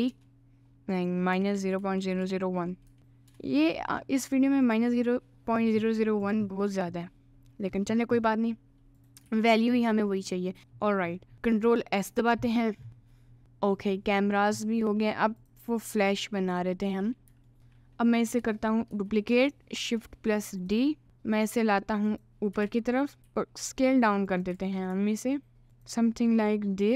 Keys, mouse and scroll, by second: 1.0-3.4 drag, 2.2 0, 4.6 click, 5.2 middle click, 6.5-7.6 middle drag, 8.2 middle click, 9.0 click, 9.4 ctrl+s, 10.2 middle click, 10.6 Tab, 11.3 ctrl+s, 11.3-13.4 middle drag, 14.2-15.5 middle drag, 16.3-17.8 shift+middle drag, 17.6 Tab, 18.9 shift+d, 20.6 click, 21.0 s, 22.1 click, 22.6 g, 23.2 s, 24.5 g.